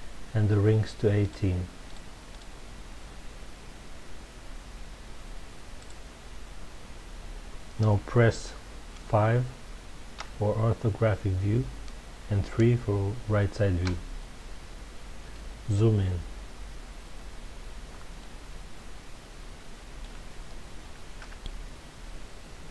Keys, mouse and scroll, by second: 1.3 click, 1.8-3.5 drag, 10.1 KP_5, 13.8 KP_3, 15.9 scroll up 1, 18.2-20.0 middle drag, 21.1 KP_3, 22.3-22.7 scroll up 1.